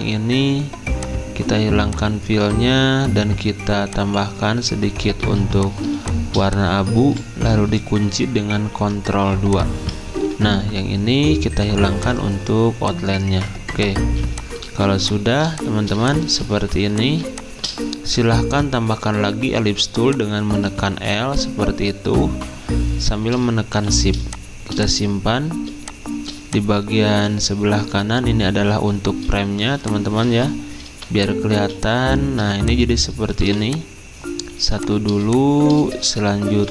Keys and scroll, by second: 0.0 ctrl+z, 5.2 z, 8.4 ctrl+2, 10.1 ctrl+z, 14.0 z, 32.0-33.4 typing, 34.6 z, 36.5 v.